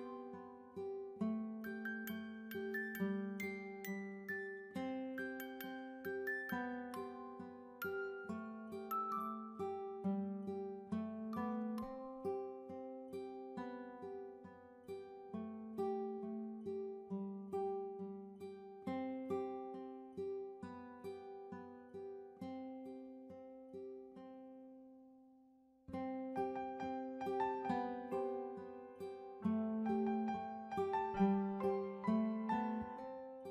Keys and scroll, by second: 8.6-9.4 typing, 30.7 a.